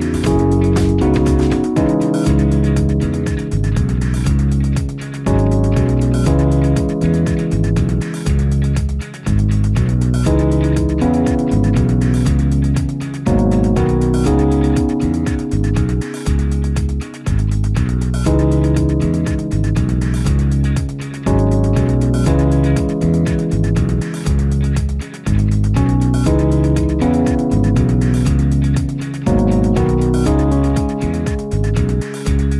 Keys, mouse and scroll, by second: 0.6 0, 24.6 ,.